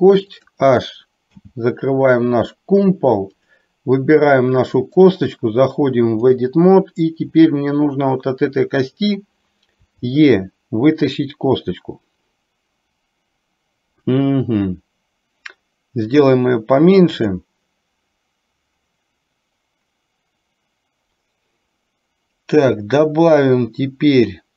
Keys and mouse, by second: 0.3 click, 1.3 h, 3.5 click, 5.2-6.6 drag.